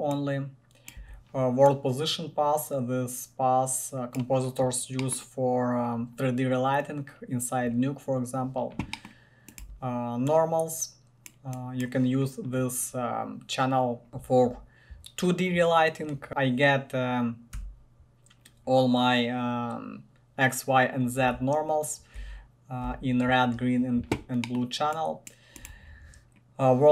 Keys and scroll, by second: 1.2 1, 9.8 1, 16.0-17.7 typing, 22.4 r, 23.1 r, 25.8 1.